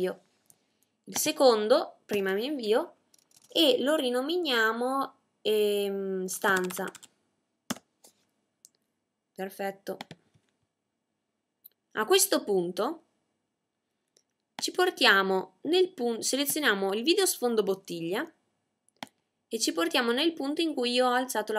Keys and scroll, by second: 4.5-5.2 typing, 6.4-7.1 typing.